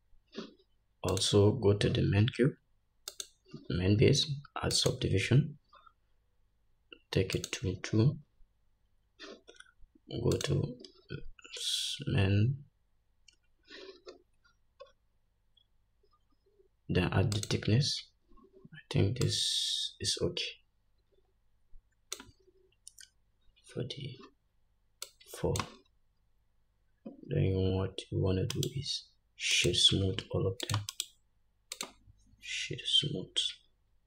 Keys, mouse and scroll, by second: 3.2-10.5 drag, 14.5-15.0 scroll down 2, 17.5-30.8 drag, 17.5-18.9 scroll down 1, 26.3-27.7 scroll up 1, 28.7-34.0 right drag.